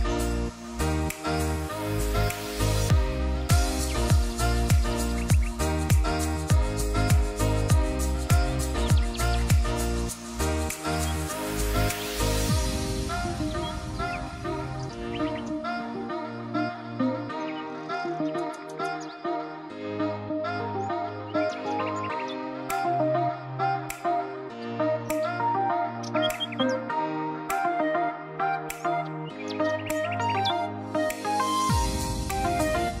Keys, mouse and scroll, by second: 9.7 ctrl+t, 11.0-13.2 alt+drag, 14.1-15.7 shift+drag, 16.2 Return, 19.1-23.7 drag.